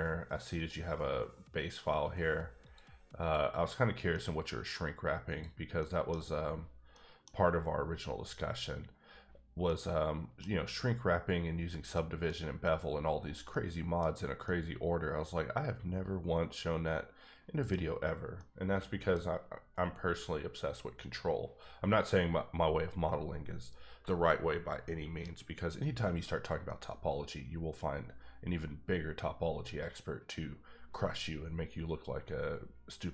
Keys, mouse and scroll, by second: 0.5 click, 2.6 click, 3.8 click, 4.1 middle click, 5.3 click, 5.8 middle click, 6.2 scroll up 2, 6.6-6.9 scroll down 1, 6.9 middle click, 9.9 middle click, 11.6-11.9 scroll down 1, 11.9 middle click, 12.6-13.5 scroll up 3, 13.5 middle click, 14.7 middle click, 18.3 middle click, 26.6 middle click.